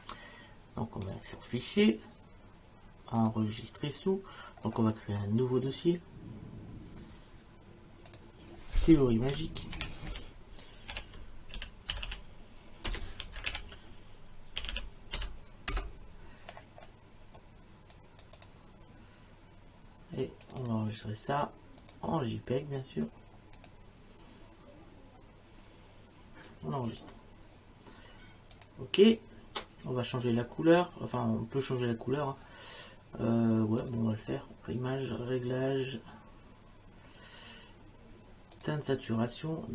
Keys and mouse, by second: 1.1 click, 3.2 click, 4.8 right click, 8.1 click, 9.8-15.7 typing, 15.7 Return, 18.0 click, 20.5 click, 21.8 click, 23.6 click, 26.9 click, 28.5 click, 33.8 click, 38.6 click.